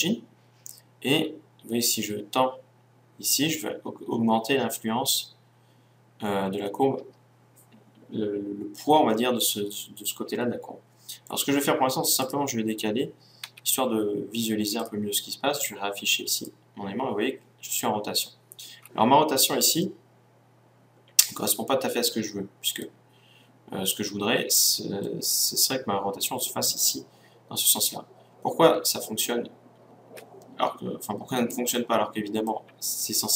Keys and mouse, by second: 11.9-13.6 right drag, 13.2 g, 13.6 click, 14.6 click, 19.5-21.6 middle drag, 23.6-28.0 middle drag, 31.4-33.3 middle drag.